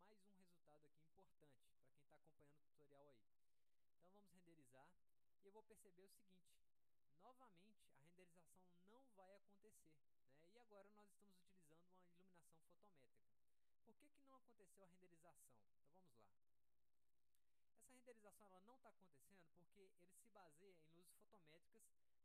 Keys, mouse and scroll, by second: 0.3 ctrl+alt+middle click, 1.3 middle click, 2.3 middle click, 3.2 middle click, 15.8 click.